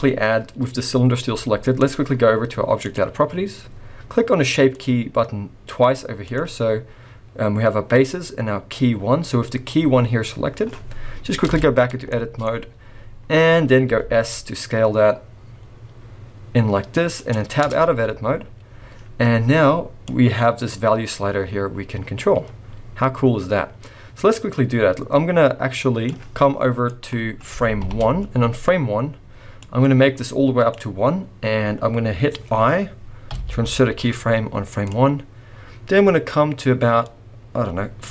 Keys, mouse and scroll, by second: 1.3 g, 2.8 click, 4.7 click, 6.2 click, 10.9-11.5 scroll up 1, 11.5 Tab, 12.1 shift+middle click, 12.4-13.0 scroll up 2, 13.0-13.9 scroll down 2, 13.9 s, 17.7 Tab, 18.3-19.4 scroll up 1, 20.0 click, 26.9 middle click, 27.8 shift+Left, 29.6 click, 31.3-32.7 scroll down 1, 33.3 i, 34.9 click.